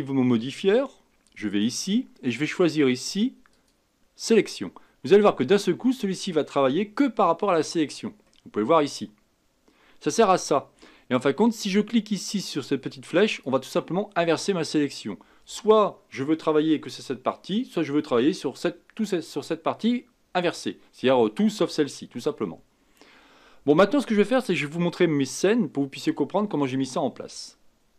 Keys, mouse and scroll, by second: 1.5 click, 3.5-6.6 drag, 8.3-11.3 middle drag, 13.3 click.